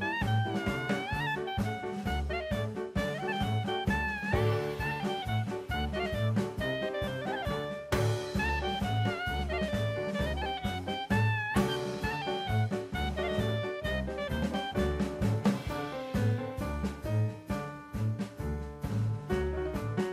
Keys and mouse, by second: 1.0 n, 4.7-6.3 drag, 6.6 s, 7.6 right click, 9.5 n, 10.9 click, 11.1 n, 11.6-12.0 middle drag, 12.4 click, 13.4 Tab, 13.9 2, 14.2 click, 15.3 t, 15.9 click, 16.9 click, 18.4 KP_0, 19.8 KP_0.